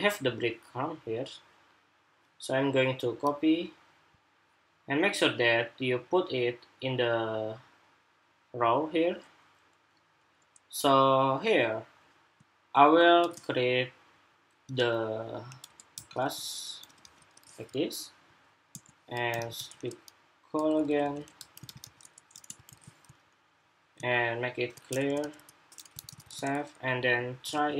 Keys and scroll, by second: 22.4 super+v, 25.7 super+s, 26.0 super+Tab, 27.3 super+r.